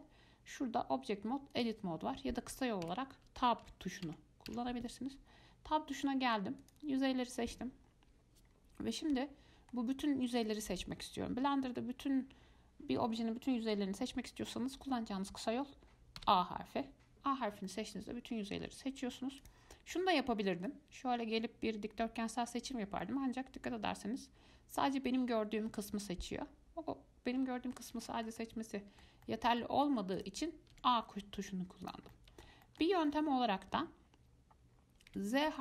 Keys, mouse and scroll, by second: 3.1 Tab, 3.9 Tab, 4.3 Tab, 4.7 Tab, 6.8 click, 8.7 scroll down 2, 9.1 middle click, 10.0 scroll up 1, 16.4 a, 17.9-19.6 middle drag, 19.6 click, 20.0 middle click, 20.9 click, 23.2-26.2 middle drag, 28.3-30.4 shift+middle drag, 30.4 click, 30.9 a, 32.0 click, 32.3-35.3 middle drag, 35.3 z.